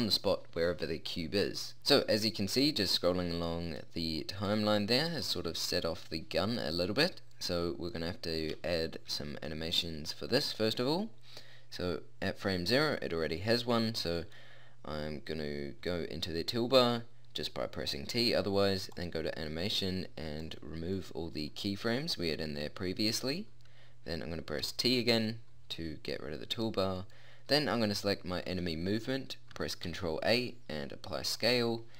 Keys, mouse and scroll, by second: 4.5 click, 6.3 middle click, 7.3-9.2 middle drag, 12.5-14.4 middle drag, 17.7-19.0 middle drag, 22.0-24.6 middle drag, 24.6 t, 26.2 middle click, 28.8 middle click, 29.8 ctrl+a.